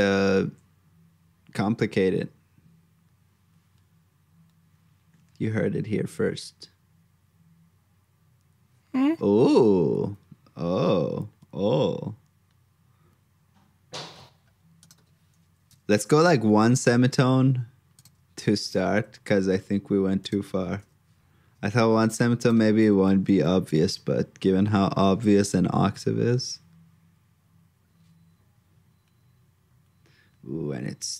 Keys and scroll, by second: 16.1 super+j, 19.2 alt+shift+Down, 22.8 super+c, 23.1 super+j.